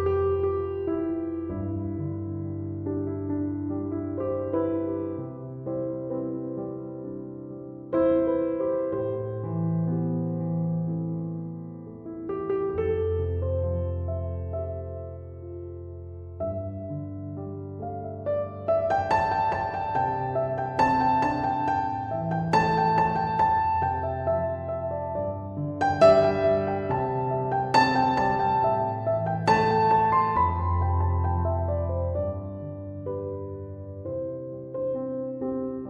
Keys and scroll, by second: 10.5 5, 11.1 Return, 20.2 BackSpace, 22.8 1, 23.1 ., 23.5 5, 24.1 Return.